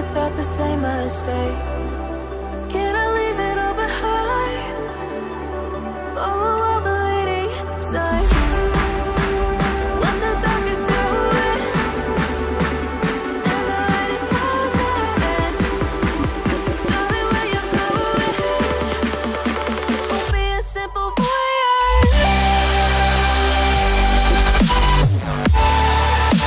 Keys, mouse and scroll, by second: 0.1 ctrl+click, 0.7 ctrl+click, 1.5 ctrl+click, 6.2-7.7 ctrl+scroll down 1, 8.4 right click, 9.5 right click, 14.3-18.7 typing, 16.0 Caps_Lock, 24.2 ctrl+z.